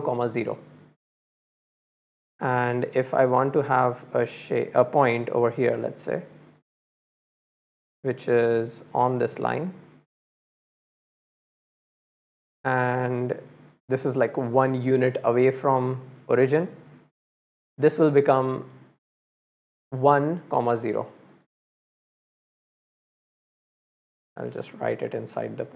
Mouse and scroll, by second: 2.5-3.9 drag, 5.4-6.4 drag, 7.2 click, 7.8 click, 9.3-10.5 drag, 10.9-11.4 middle drag, 11.5 middle click, 13.0 click, 18.6-19.1 middle drag, 19.3 click, 19.9-20.8 drag, 21.1 click, 24.5 click.